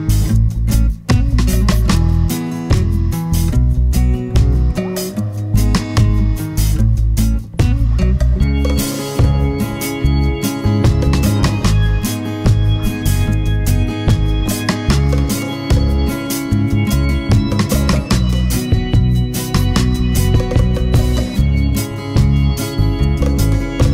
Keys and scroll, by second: 8.2 super+d, 14.0 super+d, 14.6 super+d, 15.7 super+d, 23.4 super+d.